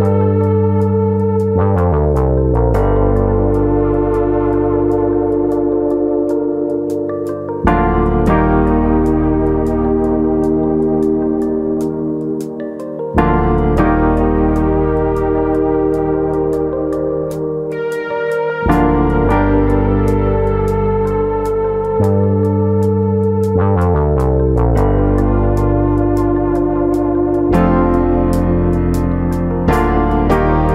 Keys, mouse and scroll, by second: 0.1 right click, 1.6 ctrl+z, 1.9 middle click, 2.3 click, 2.5 middle click, 3.4 click, 4.0 middle click, 4.3 shift+middle click, 4.5 middle click, 5.4 click, 6.2 click, 7.0 middle click, 7.4 middle click, 7.9 alt+click, 8.1 alt+click, 8.1 middle click, 8.8 alt+click, 9.0 middle click, 10.1 click, 11.3 middle click, 12.0 click, 12.4 ctrl+click, 12.7 middle click, 12.9 middle click, 13.5 ctrl+click, 14.3 click, 15.3 middle click, 15.8 middle click, 16.7 middle click, 17.1 click, 17.7 click, 18.6 middle click, 19.6 click, 20.3 click, 21.0 click, 21.6 click, 22.4 click, 24.1 click, 24.1 middle click, 25.0 middle click, 25.8 ctrl+r, 28.2 click, 28.5 middle click, 28.8 shift+middle click, 29.7 alt+click, 30.4 g.